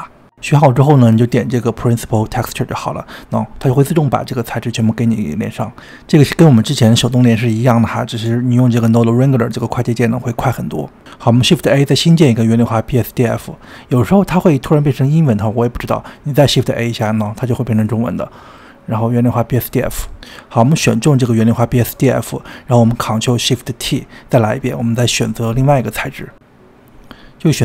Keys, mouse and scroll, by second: 2.8-3.4 scroll up 4, 3.4-4.8 middle drag, 4.8 click, 5.6-6.9 scroll down 14, 6.9 shift+middle click, 7.9 click, 8.9-9.7 shift+middle drag, 9.7 click, 10.7 shift+s, 16.1 click, 16.7 shift+a, 20.7 click, 21.3 click, 23.5 ctrl+shift+t.